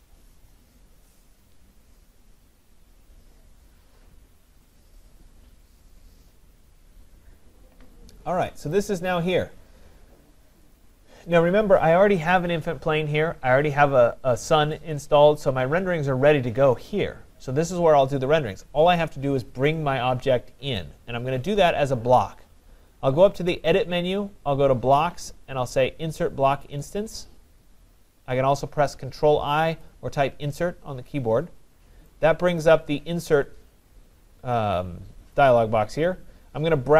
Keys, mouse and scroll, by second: 8.8 click, 10.8 click, 23.7 click, 29.9 click, 32.6 click.